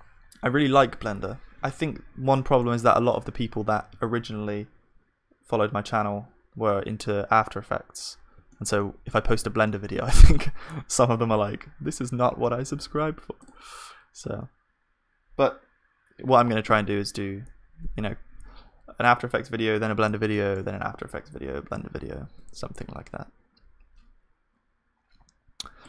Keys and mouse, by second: 2.3-3.9 middle drag, 3.9 ctrl+s, 9.5 ctrl+s, 11.3 middle click, 11.4 KP_1, 11.9 middle click, 12.6 middle click, 18.4-25.0 middle drag, 22.2 shift+a.